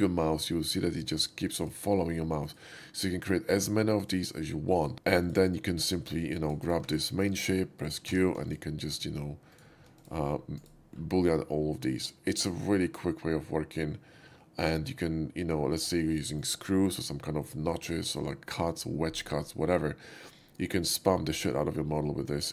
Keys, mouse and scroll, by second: 1.4 click, 2.4 right click, 3.5 click, 3.8 right click, 4.6 click, 5.2 shift+click, 5.6 shift+click, 6.3 shift+click, 6.8 4, 7.2 click, 7.9 q, 8.5 click, 8.5 shift+q, 9.0 drag, 9.5 click, 10.0 right click, 10.6 shift+right click, 11.0-15.7 shift+middle drag, 16.1-16.4 shift+middle drag.